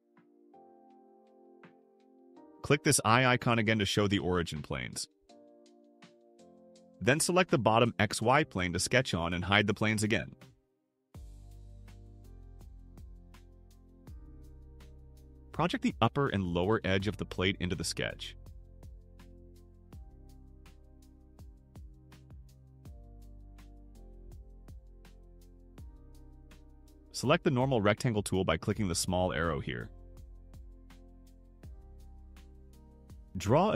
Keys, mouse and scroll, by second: 4.2 click, 6.6 click, 8.4 click, 10.3 click, 14.2 click, 18.4 click, 21.2 click, 23.4 click, 28.6 click, 32.4 click.